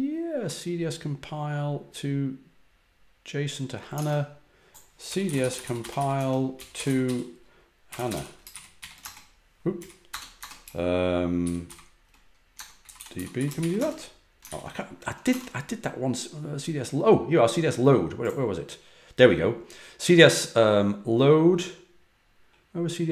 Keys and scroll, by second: 3.9 super+Tab, 4.7-10.3 typing, 9.7 Up, 11.4-14.0 typing, 14.4 ctrl+l, 15.2 super+Tab.